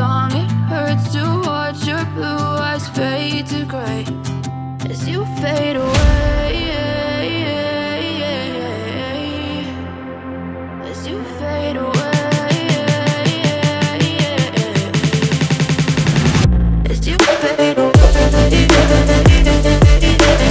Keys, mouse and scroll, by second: 0.5 ctrl+o, 1.4-2.2 scroll up 2, 3.6 click, 5.1 click, 7.2 click, 8.2 F4, 9.4 click, 11.0 F9, 12.4 click, 15.0 scroll down 1, 16.8 click, 19.7 click.